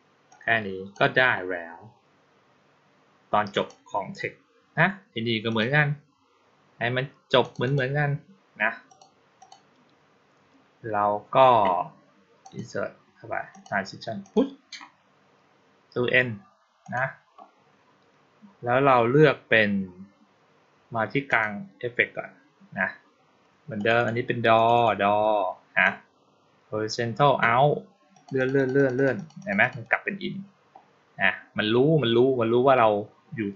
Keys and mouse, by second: 0.1-0.8 drag, 3.4 click, 5.3 click, 7.3 click, 7.5 click, 8.7 click, 9.3 click, 12.3 click, 13.4 click, 14.1 click, 16.7 click, 21.1 click, 23.6 click, 23.8 click, 24.4 click, 24.6 click, 28.0 click, 28.2 click, 28.4 click, 28.6 click, 28.8 click, 29.0 click, 29.2 click, 29.5 click, 29.7 click.